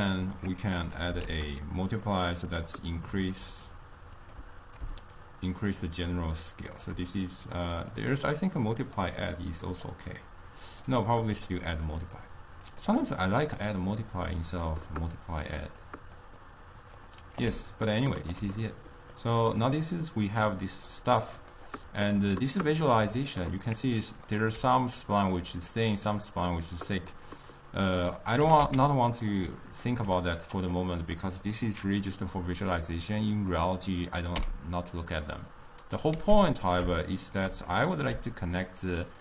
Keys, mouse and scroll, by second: 1.0 click, 1.3 shift+d, 2.7-9.9 drag, 10.9 click, 11.6 click, 12.1-15.7 drag, 15.9-16.9 drag, 17.2-17.6 drag, 17.6 d, 17.8 right click, 18.5 d, 19.2-23.2 middle drag, 23.2 click, 23.9-24.7 middle drag, 24.7-25.4 d, 27.9 click, 28.4 g, 29.6-30.7 middle drag, 30.7 click, 31.1 click, 33.2-34.4 middle drag, 34.4 m, 36.2 m, 37.1-38.2 shift+middle drag, 38.2-39.2 typing, 38.6 click.